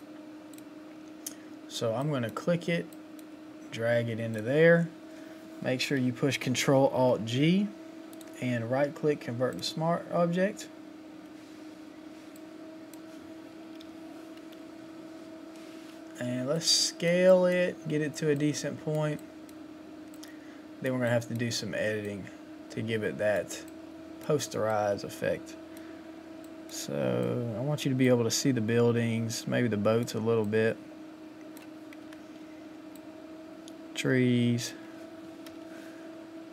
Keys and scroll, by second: 8.2 ctrl+alt+g, 32.1 Return, 35.4 ctrl+t.